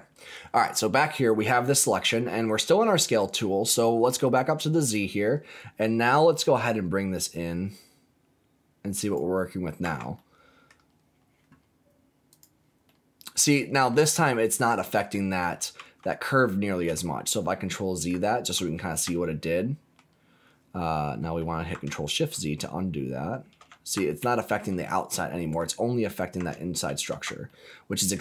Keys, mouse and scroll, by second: 1.5 shift+middle click, 2.2-3.3 middle drag, 4.2 click, 4.9-5.3 scroll up 3, 6.6-9.1 drag, 9.4 scroll down 2, 9.8 Tab, 10.1 middle click, 10.7 scroll down 1, 12.4 click, 12.8-13.9 middle drag, 14.5 middle click, 15.7 ctrl+z, 16.9-18.0 middle drag, 18.5 ctrl+z, 19.1 middle click, 22.2 ctrl+shift+z, 24.2 ctrl+z, 24.8 middle click, 26.8 ctrl+shift+z, 27.4 middle click.